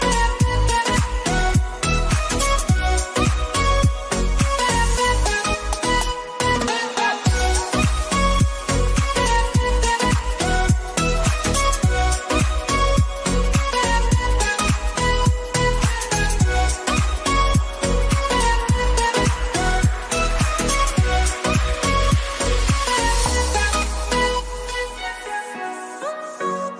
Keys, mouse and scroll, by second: 1.7 click, 4.4 click, 5.9 click, 7.1-10.8 alt+drag, 10.8 Up, 12.6 click, 13.1-16.3 alt+drag, 18.6 click, 21.3 click, 24.3 ctrl+c, 24.7-26.7 drag.